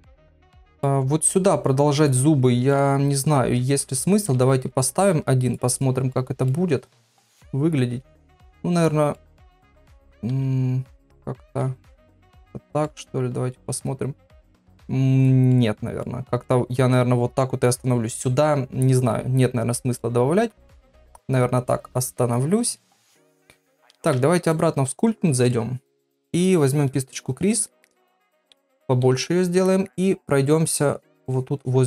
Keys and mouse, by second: 0.5 middle click, 2.0 click, 2.7 KP_1, 3.6 shift+middle click, 4.3 shift+d, 5.1 r, 6.1 middle click, 6.8 click, 7.3-8.5 drag, 8.8 click, 9.1 middle click, 10.3 r, 12.4 click, 12.8 middle click, 14.4 click, 14.6 x, 15.2 click, 15.5 middle click, 16.4 middle click, 19.9-22.8 middle drag, 23.4 click, 24.0 ctrl+Tab, 27.7 middle click, 28.6 ], 28.7 ], 29.7 shift+middle click, 31.0 click, 31.3 click, 31.6 click.